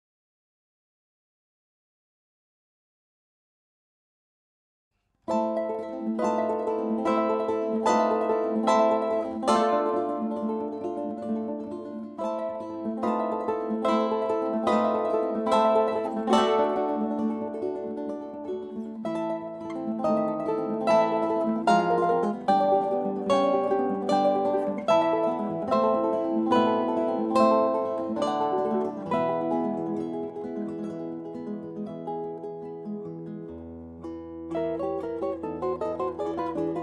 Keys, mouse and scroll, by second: 2.9-5.1 middle drag, 6.3 c, 11.5 Tab, 12.3 Tab, 15.0 Tab, 16.4 z, 17.4-21.0 middle drag, 19.2 Tab, 20.8 Tab, 24.7 Tab, 25.3 Tab, 26.4 z, 28.0 c.